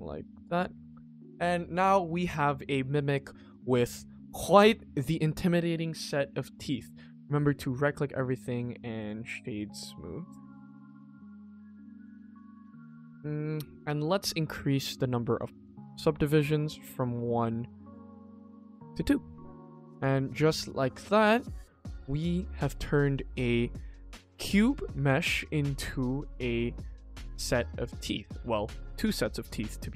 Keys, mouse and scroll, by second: 0.5 click, 0.8 middle click, 1.1 scroll down 2, 1.3 middle click, 1.9 middle click, 2.2-3.2 scroll down 1, 3.2 middle drag, 3.8 ctrl+s, 4.1-4.4 scroll up 2, 4.4 middle click, 6.3 middle drag, 7.3 click, 7.5 right click, 8.4 click, 8.6-9.5 right drag, 9.5 click, 9.7 right click, 10.6 click, 10.8-11.3 right drag, 11.3 click, 11.6-12.2 right drag, 12.2 click, 12.4 right click, 13.1 middle click, 13.3-13.6 scroll down 2, 13.6 click, 14.0 click, 15.2 click, 15.6 click, 16.2 click, 17.1-17.8 scroll down 2, 17.8 click, 18.1 click, 18.4-18.7 scroll up 1, 18.9 click, 19.8 click, 20.2 click, 20.9 click, 22.0 click, 22.3 click, 22.7 shift+middle click, 23.3 click, 23.6 click, 24.6 click, 24.9 click, 25.5 click, 26.6 click, 27.0 click, 27.4 click, 27.7 scroll down 2, 27.9 middle drag, 28.3 ctrl+s, 29.6 middle click.